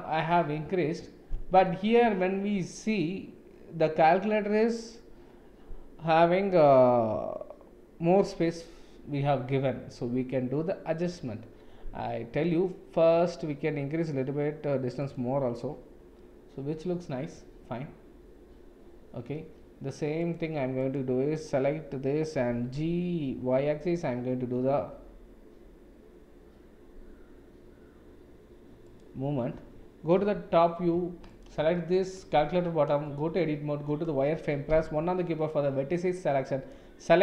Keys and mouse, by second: 15.1 click, 16.1-19.3 middle drag, 20.9 click, 22.4 g, 30.1 KP_7, 31.7-32.1 shift+middle drag, 32.4 Tab, 33.3 shift+z, 34.7 1, 35.4-36.7 drag.